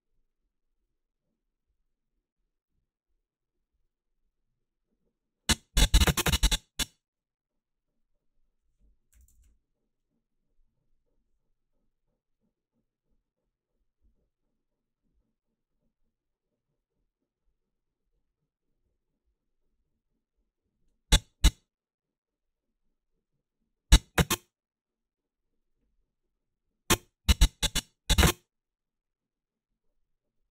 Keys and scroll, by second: 8.9-9.7 typing.